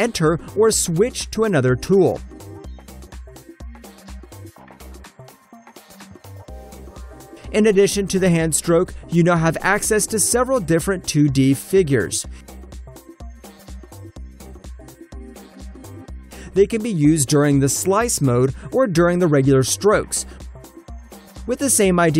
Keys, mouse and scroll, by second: 0.1 shift+middle click, 1.5 alt+right click, 1.7 alt+middle click, 1.9 alt+click, 2.4 shift+click, 3.0 alt+click, 4.7 shift+click, 5.2 alt+click, 5.6 ctrl+middle click, 6.4 ctrl+right click, 6.9 click, 7.3 alt+middle click, 7.6 alt+click, 10.2 Return, 10.7 alt+click, 12.0 shift+middle click, 13.8 alt+click, 14.7 shift+middle click, 15.4 alt+middle click, 16.2 click, 16.5 alt+middle click, 16.8 alt+click, 17.9 shift+click, 19.3 shift+click, 20.2 alt+click, 20.5 alt+Return, 20.5 click, 21.0 alt+click, 21.8 shift+middle click.